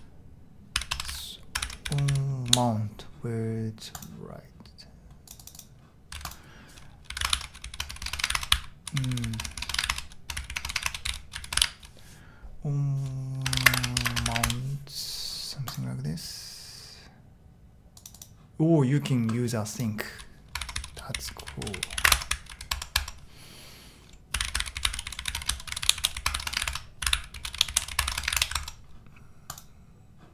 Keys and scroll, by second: 0.0-2.9 typing, 6.8-11.8 typing, 13.3-14.7 typing, 20.6-23.0 typing, 24.1-28.8 typing.